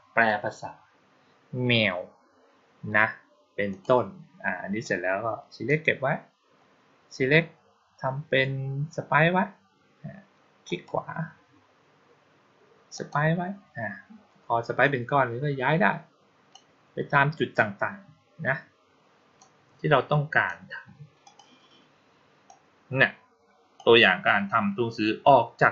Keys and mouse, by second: 3.6 click, 4.7-5.5 drag, 10.5 right click, 12.8 click, 14.7-16.4 drag, 19.2-20.3 drag, 21.1 click, 22.3-23.6 drag.